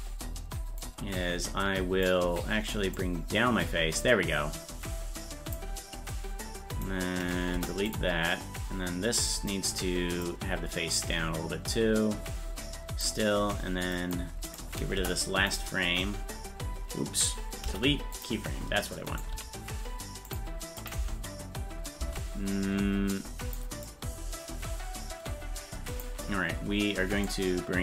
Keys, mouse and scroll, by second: 0.8-2.1 drag, 3.0-5.6 drag, 6.7 right click, 7.5 Delete, 8.3-9.5 drag, 10.2-13.1 drag, 14.0 click, 14.5 right click, 15.0 Delete, 19.1 right click, 19.3 g, 20.8 click, 21.0 space, 23.2 click, 23.2 space, 23.9-26.0 drag, 27.3 click.